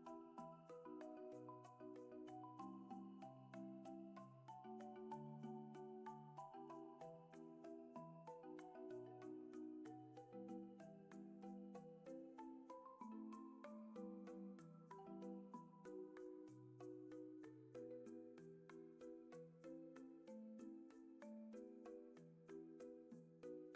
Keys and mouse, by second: 2.9 alt+z, 3.4 shift+middle click, 3.7 middle click, 5.1 c, 11.5 alt+z, 12.0-13.7 middle drag, 15.8 Tab, 20.6-21.6 middle drag, 21.6 KP_0.